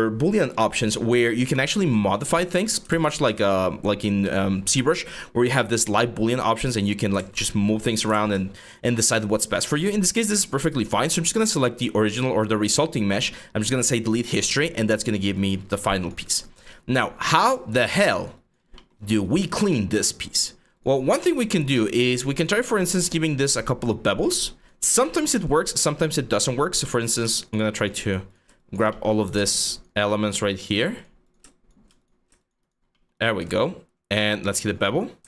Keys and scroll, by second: 1.1 w, 2.5 ctrl+z, 6.8 ctrl+z, 7.7 ctrl+z, 20.7 q.